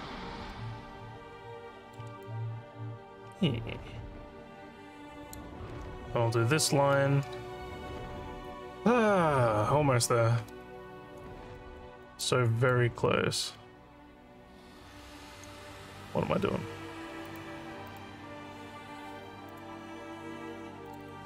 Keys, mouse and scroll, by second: 0.5-1.9 alt+middle drag, 2.3-5.3 alt+drag, 11.0 alt+middle click, 11.6 alt+middle click, 12.1 alt+click, 12.6 click, 13.7 Tab, 17.3 click, 17.9 click, 19.5 click, 20.9 click, 21.0 click.